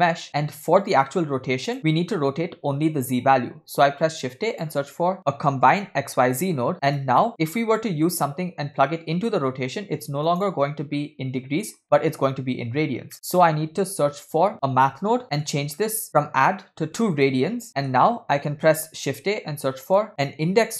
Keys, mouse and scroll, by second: 0.3-1.2 scroll up 1, 1.3-1.6 drag, 3.7 shift+a, 6.7 click, 6.7 scroll up 2, 7.2 middle click, 8.1-10.5 drag, 11.0-11.8 scroll up 2, 11.8 middle click, 13.1-13.4 scroll down 2, 13.1 middle click, 13.6 shift+a, 15.8 scroll up 2, 16.1-17.4 drag, 17.7 middle click, 18.9 shift+a.